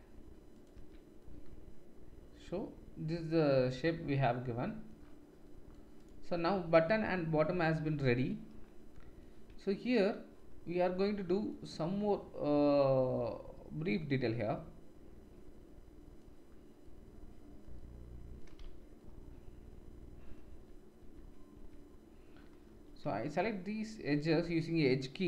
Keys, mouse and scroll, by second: 0.8 Tab, 6.0 drag, 9.5 Tab, 13.1-18.2 middle drag, 18.6 Tab, 20.5 Tab, 21.0 Tab, 22.7 3, 23.2 alt+click, 24.4 2, 24.8 alt+click.